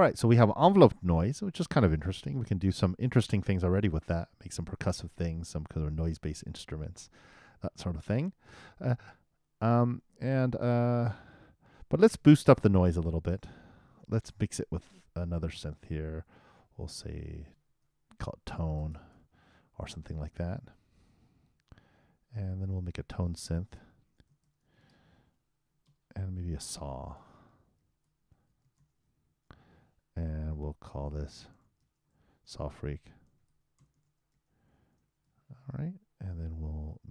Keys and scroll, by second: 27.1 shift+s, 27.8 shift+a, 28.8-29.6 typing, 32.1 shift+q, 32.9 shift+s, 34.4-35.7 typing.